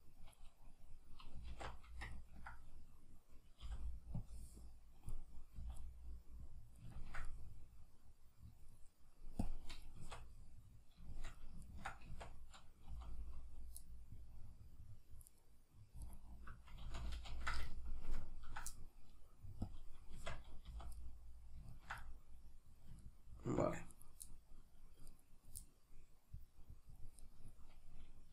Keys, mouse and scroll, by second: 1.5 alt+q, 1.5-9.4 middle drag, 3.6 b, 9.4-10.4 drag, 10.0 Tab, 10.4-15.3 middle drag, 12.1 Tab, 12.9 z, 15.3 right click, 16.0 alt+right click, 16.9 ctrl+z, 18.1 ctrl+KP_Add, 19.7-21.0 drag, 20.2 Tab, 20.7 z, 21.0-24.0 middle drag, 24.0-24.3 right drag, 24.3 middle click, 25.1 right click, 25.6-27.2 middle drag, 27.2-28.3 right drag.